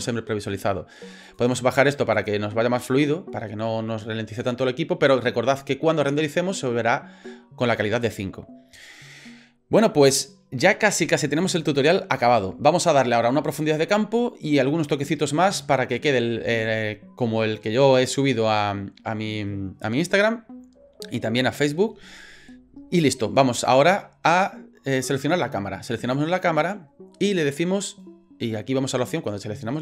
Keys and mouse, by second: 1.3 click, 1.5 click, 2.2 click, 26.0 click.